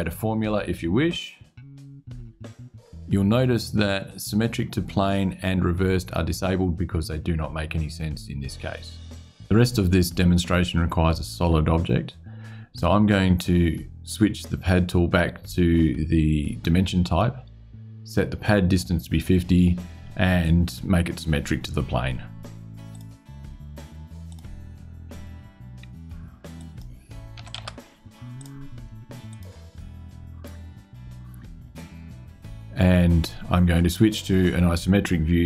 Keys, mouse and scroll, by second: 0.8 click, 22.6 click, 24.0 click, 26.3 click, 27.1 KP_5, 27.3 KP_0, 28.1 click, 29.0 click.